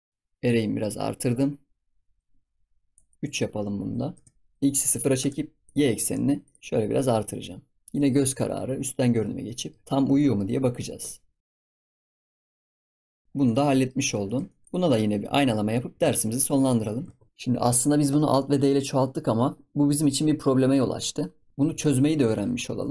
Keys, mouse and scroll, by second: 0.0 click, 0.1 middle click, 0.4-6.6 drag, 6.9-8.4 drag, 8.4 KP_7, 8.7-9.4 scroll up 7, 9.4-9.8 shift+middle drag, 9.8-10.1 scroll up 6, 9.8 shift+middle click, 10.1-11.6 shift+middle drag, 11.6-12.6 shift+drag, 12.6 ctrl+s, 12.6-13.5 scroll down 10, 12.8 ctrl+s, 13.0 ctrl+s, 13.0 click, 13.5 ctrl+s, 13.6 middle drag, 13.8 scroll up 1, 14.0 scroll down 1, 14.2 shift+middle click, 14.6 click, 15.0 scroll up 3, 15.3 shift+middle click, 15.9 ctrl+s, 16.6 click, 16.9 scroll down 1, 17.0 ctrl+s, 19.2 scroll up 3, 19.4-21.1 scroll down 3, 21.1-21.5 scroll up 1, 21.5 scroll down 2, 21.7 shift+middle click, 22.2 ctrl+s, 22.6-22.9 scroll up 4.